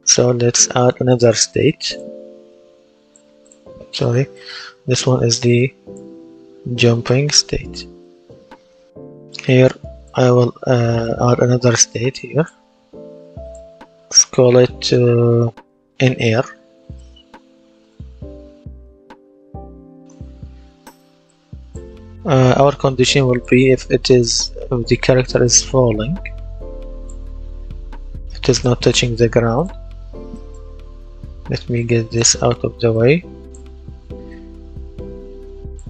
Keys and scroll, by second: 16.2 shift+i, 16.5 n, 17.6-19.7 typing, 19.9 Return.